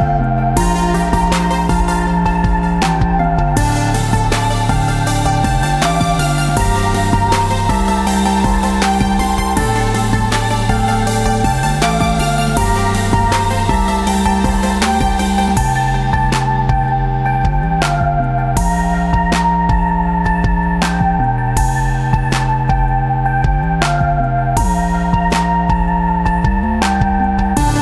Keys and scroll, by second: 2.1 space, 2.6 space, 26.2 shift+Tab, 26.8 space, 27.3 ctrl+space.